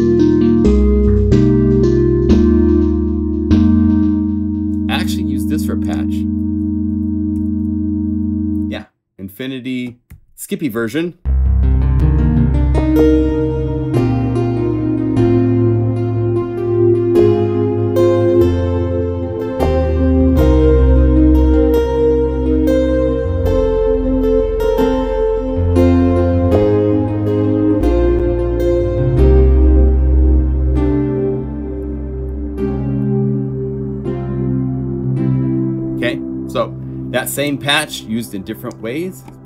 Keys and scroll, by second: 34.0 F4.